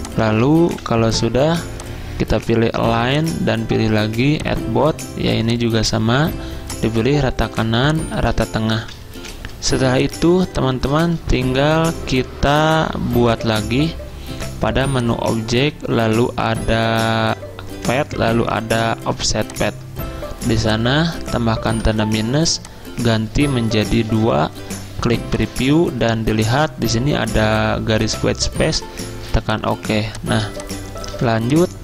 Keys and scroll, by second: 0.7-1.4 typing, 8.6-10.2 typing, 11.2 typing, 21.9 -, 24.1 2, 29.3 z.